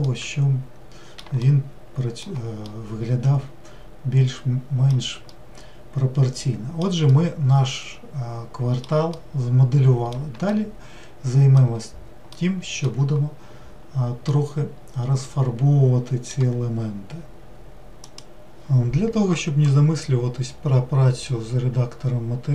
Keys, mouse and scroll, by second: 0.1-13.7 middle drag, 13.7-14.3 scroll down 1, 14.3-22.5 middle drag.